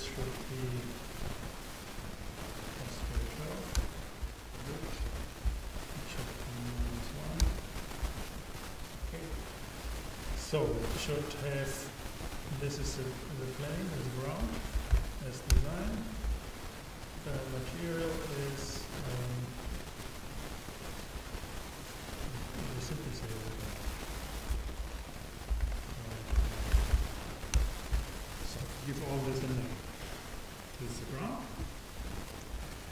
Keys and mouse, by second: 2.3-4.0 drag, 6.0-7.9 drag, 12.5-15.7 drag, 17.2-21.1 drag, 23.2-25.0 drag, 24.7 BackSpace, 25.6 BackSpace.